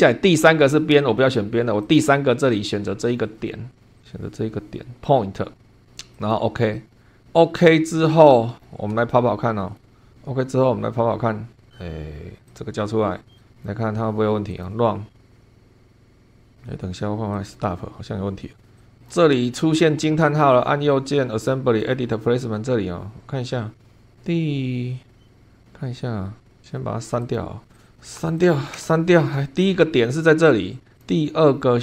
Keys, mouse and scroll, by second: 1.8 click, 3.1-3.5 scroll up 1, 3.9 click, 5.6 scroll down 1, 6.1 click, 6.9 scroll down 2, 7.0 middle click, 7.8-8.8 scroll down 6, 9.0 shift+middle click, 9.9 shift+scroll down 2, 12.5 click, 13.4 click, 14.5 click, 17.3 click, 18.8 click, 18.9 click, 20.3 right click, 21.7 click, 25.1 scroll up 1, 25.2 scroll down 1, 25.4 scroll up 1, 27.2 click, 27.7 click, 28.0 BackSpace, 28.4 click, 28.7 BackSpace, 29.6 scroll up 1, 30.9 click, 31.5 scroll down 1.